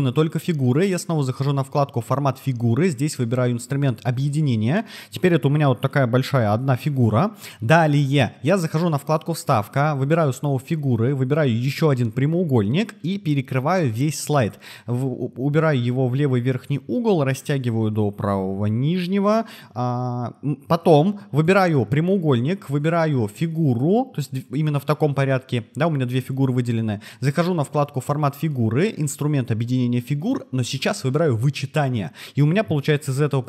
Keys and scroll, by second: 6.5 super+z.